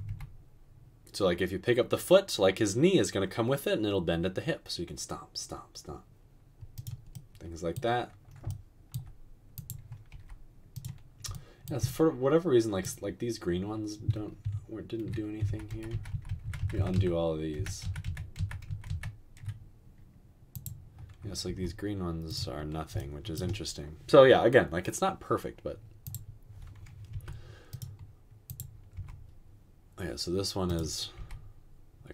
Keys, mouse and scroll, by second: 0.1 g, 10.1 g, 15.5 ctrl+z, 15.9 ctrl+z, 16.1 ctrl+z, 16.3 ctrl+z, 16.9 ctrl+z, 17.9 ctrl+z, 21.7 r, 27.3 typing, 28.9 typing, 31.1 typing.